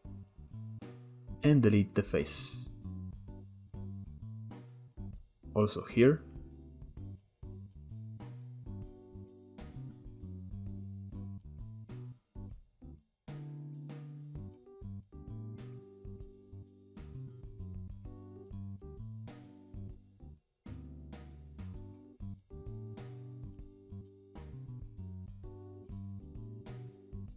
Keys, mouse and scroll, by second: 0.4 click, 1.9 x, 2.7-4.7 shift+middle drag, 4.7-5.3 scroll up 1, 5.3 k, 7.7 click, 8.2 x, 8.5 middle drag, 8.6 Tab, 8.7 scroll down 1, 8.9 Tab, 9.2 middle click, 9.4 click, 9.6-10.2 middle drag, 10.2 KP_7, 10.6 shift+middle click, 10.9 scroll up 1, 11.0 click, 11.2 Tab, 11.4 Tab, 11.9 shift+middle click, 12.3 k, 16.6 click, 16.7 x, 17.0 scroll down 2, 17.1 shift+middle click, 17.5-18.5 scroll up 3, 17.6 shift+middle click, 18.5 k, 20.3 click, 20.5 x, 21.0 shift+middle click, 21.4-22.0 scroll up 1, 22.0 k, 23.7 click, 24.1 x, 24.4 scroll down 1, 24.5-26.9 shift+middle drag, 26.9 scroll up 1, 27.1-27.3 middle drag.